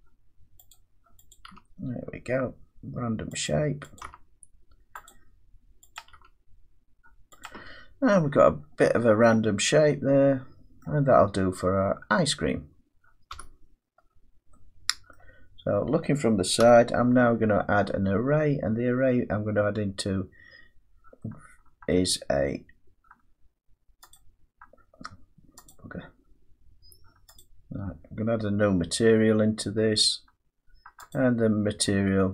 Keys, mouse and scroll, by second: 0.7 click, 1.3 click, 1.5 g, 3.5 click, 4.0 click, 4.1 g, 5.1 click, 6.0 click, 6.1 g, 7.4 click, 8.2 Tab, 8.6-9.1 scroll down 3, 10.8 middle click, 11.3-12.1 scroll down 1, 12.1-13.3 scroll down 1, 13.3 1, 15.1 scroll up 2, 15.2 middle click, 16.6 1, 21.9 middle click, 24.1 click, 25.7 click.